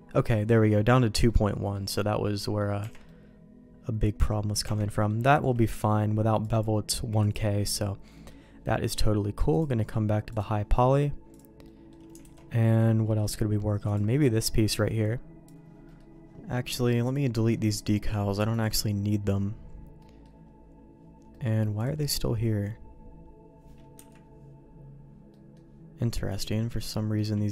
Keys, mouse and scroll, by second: 1.2 middle click, 2.0 middle click, 2.8 Tab, 3.0-4.2 middle drag, 4.6 Tab, 4.9 middle click, 5.3 shift+middle click, 6.4 click, 7.2 click, 7.6 middle click, 8.1 middle click, 9.5-10.7 drag, 10.7 middle click, 11.3 click, 11.6 middle click, 12.2 alt+a, 13.0 middle click, 13.8 click, 15.8 middle click, 17.0 click, 17.3-18.6 right drag, 20.0 middle click, 21.3 middle click, 21.8 click, 22.0 middle click, 23.9 KP_Decimal, 25.3 middle click.